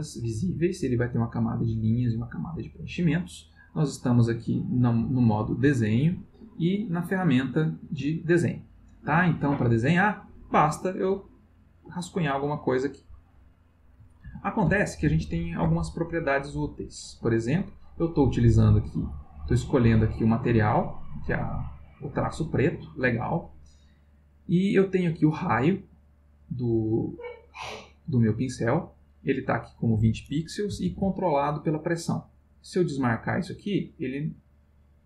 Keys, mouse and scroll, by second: 10.6 click, 11.9-13.2 drag, 14.2 ctrl+z, 18.7 click, 22.3 click, 28.6 click, 30.9 ctrl+z, 32.9 click, 33.8-35.0 drag.